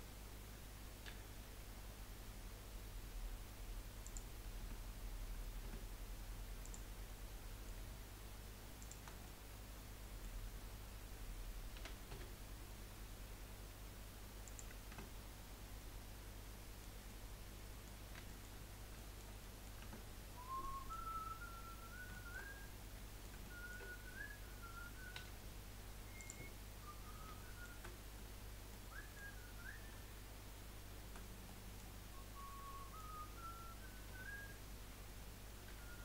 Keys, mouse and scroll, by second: 1.0 g, 4.7 Tab, 5.7 Tab, 6.6 click, 7.0-8.8 middle drag, 8.8 shift+click, 9.2-11.8 middle drag, 11.8 s, 14.9 Tab, 15.4-15.8 scroll down 5, 15.8-18.0 middle drag, 18.0 scroll down 2, 18.2-19.0 shift+scroll up 3, 18.3-18.7 shift+middle drag, 19.0-19.8 shift+middle drag, 19.8 Tab, 20.2-20.6 scroll up 1, 20.6-22.1 middle drag, 22.1-22.8 shift+scroll up 3, 22.3 shift+middle click, 22.8-25.2 middle drag, 25.2 1, 26.2 click, 26.7-27.4 scroll down 3, 27.4 shift+middle click, 27.7-28.3 shift+scroll up 2, 28.5 scroll up 2, 28.7 middle click, 29.3 scroll up 2, 31.5-34.1 middle drag, 34.1 2, 35.7 3.